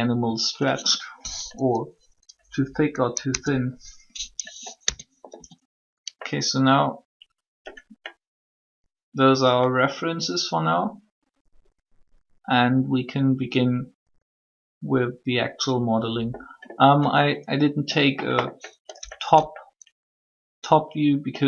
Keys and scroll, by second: 3.1 3, 4.8 Tab, 5.3 a.